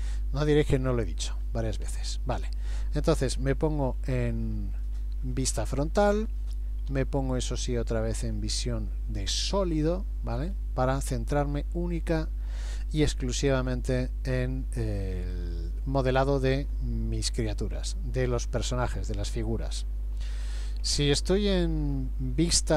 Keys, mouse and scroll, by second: 1.3 KP_1, 1.9 KP_3, 4.2 shift+middle click, 5.4-6.2 scroll up 2, 6.9 z, 10.5-11.1 scroll up 1, 11.1-11.5 scroll down 1, 12.0 scroll down 2, 14.0 middle click, 20.4 KP_1, 20.8 KP_3.